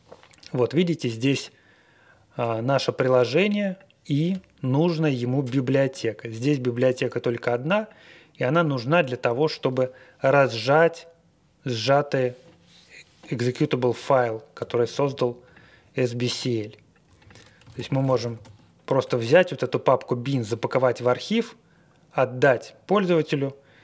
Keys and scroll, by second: 17.4-19.0 typing.